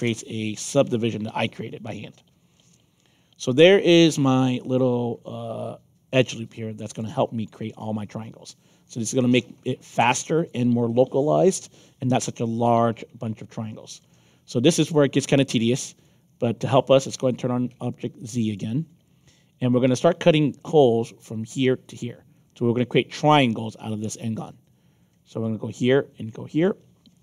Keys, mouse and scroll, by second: 1.3-7.4 alt+drag, 8.0 scroll up 2, 8.1 scroll down 2, 8.4 alt+middle click, 8.9-9.2 scroll up 2, 9.6 alt+middle click, 10.0 alt+click, 10.9 alt+middle click, 11.6 middle click, 12.3 alt+middle click, 15.3 alt+click, 17.2 click, 18.4 click, 25.3 click, 26.5 click.